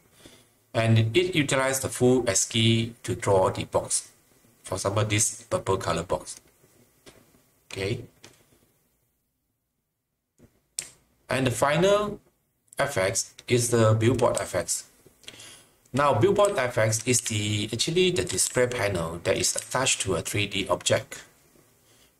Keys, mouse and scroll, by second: 10.7-22.1 typing.